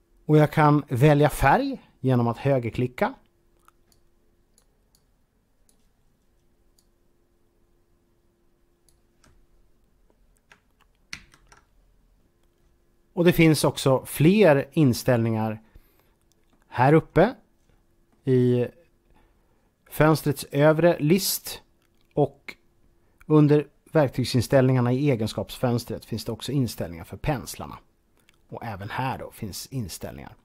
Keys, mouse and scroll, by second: 2.0 z, 2.1 right click, 4.1 click, 6.9-8.8 drag, 11.0 ctrl+z, 12.0 right click, 16.3-18.2 middle drag, 20.6 middle click, 24.5-24.9 scroll down 3, 25.2-27.7 scroll up 4, 28.2 middle click.